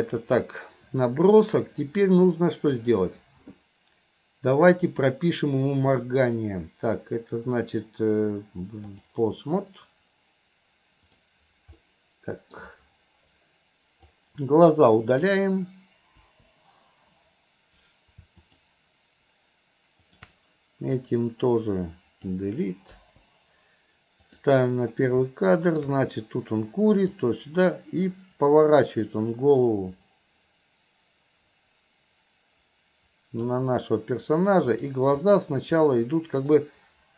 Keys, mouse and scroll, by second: 2.8 click, 4.9-9.2 drag, 11.1 click, 11.8-12.6 middle drag, 14.1-15.3 drag, 16.3 Delete, 18.5 click, 20.1 click, 21.0-22.3 drag, 23.1 Delete, 24.4 click, 25.3-25.9 middle drag, 27.3-33.6 drag, 34.7 click, 36.0 middle click.